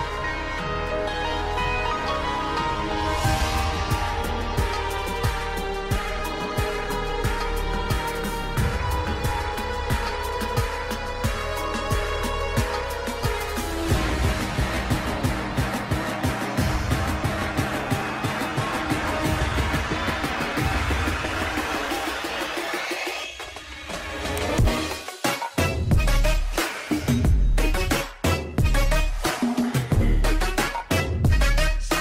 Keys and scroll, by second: 3.4 F3, 4.7 e, 5.2 shift+F2, 5.5 Escape, 7.1 ctrl+Page_Down, 13.8 F3, 16.2 F10, 21.5 F3, 21.9 space, 29.0 ctrl+g, 29.6 c, 30.1 Escape.